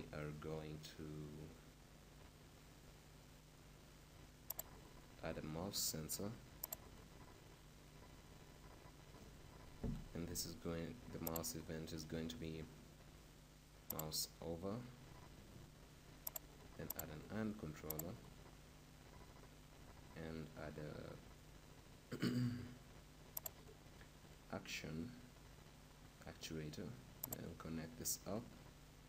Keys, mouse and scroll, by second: 11.3-13.0 drag.